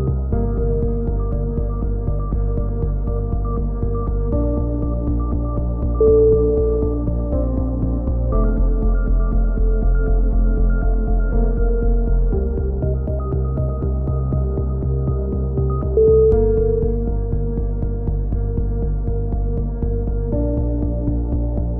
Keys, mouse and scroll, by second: 0.0 shift+s, 1.2 click, 2.2 a, 3.0 n, 7.2 click, 8.7 n, 9.0 KP_3, 9.2 z, 9.5 click, 12.0 click, 15.7 t, 16.1 click, 17.7 t, 19.1 r, 19.9 s, 20.8 s.